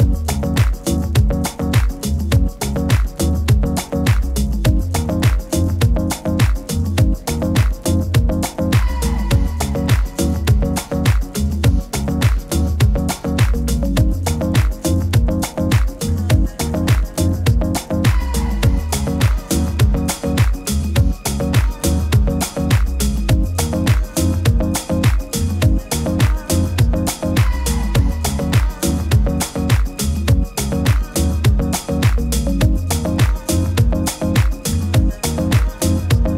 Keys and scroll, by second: 5.4 super++, 5.6 super++, 26.2 super+z, 29.4 super+-.